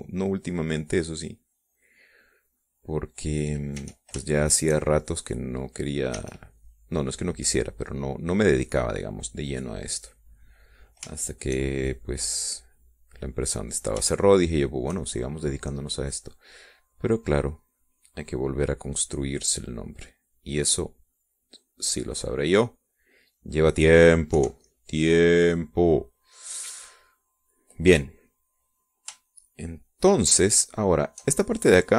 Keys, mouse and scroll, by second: 1.6 click, 2.6 click, 3.8-4.9 drag, 5.2 e, 5.7 shift+click, 6.6 click, 7.6 e, 7.8-12.4 drag, 13.2-15.2 shift+drag, 15.6 shift+middle click, 16.8 shift+middle click, 17.5-24.8 drag, 25.0 middle click, 25.8 KP_5, 26.1 middle click, 27.0 middle click, 28.5 middle click, 29.9 middle click, 30.7-31.9 shift+drag.